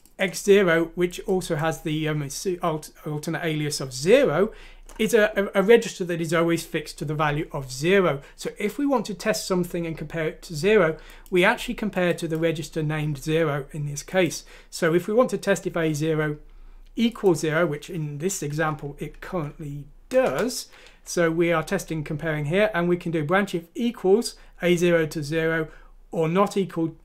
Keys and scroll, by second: 19.2 F6, 20.2 Return.